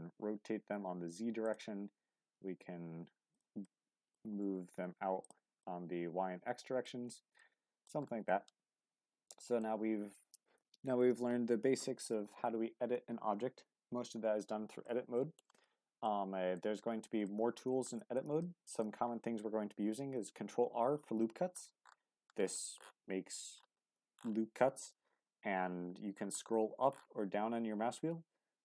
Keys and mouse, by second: 0.2 z, 1.4 click, 1.9 g, 2.1 x, 3.3 click, 3.6 middle click, 4.2 g, 4.6 y, 5.2 click, 5.6-6.9 drag, 7.1 Tab, 7.4-7.9 drag, 8.3-9.6 drag, 14.9-15.4 middle drag, 16.1-16.6 middle drag, 17.2-17.6 shift+middle drag, 18.0 Tab, 18.4 middle click, 19.7 ctrl+r.